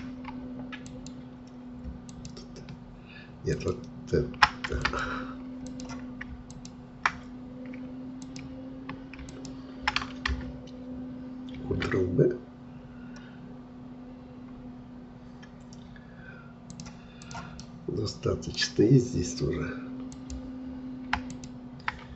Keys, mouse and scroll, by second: 0.8-11.6 alt+drag, 11.6 ctrl+b, 17.2 click, 17.6-20.1 middle drag, 20.1-22.1 drag.